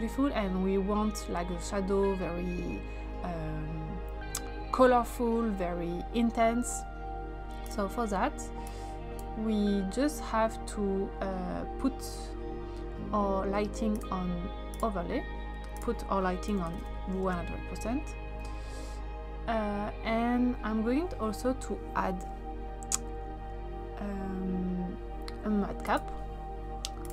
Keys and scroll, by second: 16.3-17.3 typing.